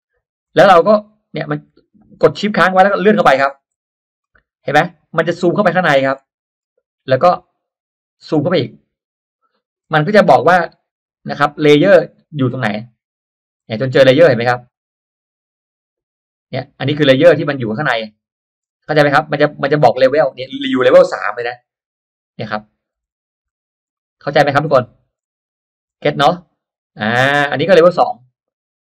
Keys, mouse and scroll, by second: 0.8 middle click, 3.1 shift+middle click, 4.1-4.5 scroll up 2, 5.4-5.7 scroll down 2, 5.7 middle click, 6.5-6.8 scroll up 2, 7.9-8.3 shift+scroll up 2, 9.1-9.4 shift+scroll down 2, 12.1 shift+scroll down 2, 12.7 shift+scroll up 2, 14.9 scroll up 2, 19.3-19.6 shift+scroll down 2, 20.0-20.3 shift+scroll down 2, 23.9 middle click, 24.2 scroll down 2, 25.5-25.8 shift+scroll down 2, 27.0-28.0 middle drag.